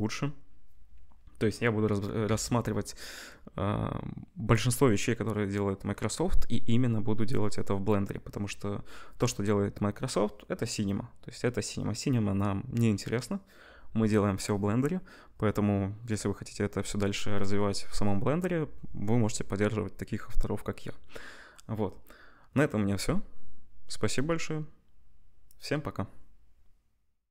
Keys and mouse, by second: 26.2-27.3 middle drag.